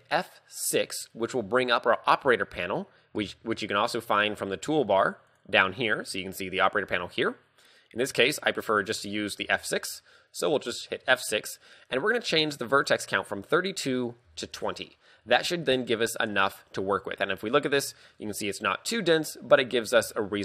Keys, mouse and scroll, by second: 0.7 F6, 3.2 t, 5.3 click, 7.8 click, 9.5 t, 11.1 F6, 16.3 middle click, 17.0-17.3 scroll up 3, 17.3 middle click, 18.0 Tab, 18.2 middle click, 19.3 KP_3, 19.8 scroll down 4, 20.2 shift+middle click.